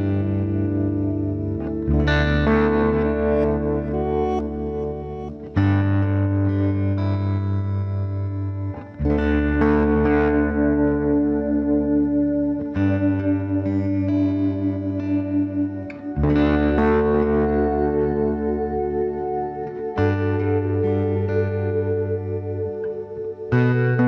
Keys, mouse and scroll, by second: 1.4 ctrl+Tab, 3.6 right click, 4.5 KP_Decimal, 5.0 middle click, 5.6 g, 6.5 b, 7.2 g, 9.1 ctrl+r, 10.4-11.9 right drag, 10.7 b, 11.0 g, 12.9 g, 16.1 right click, 16.3 b, 16.7 g, 19.5-21.7 middle drag, 21.0 b, 21.7 g.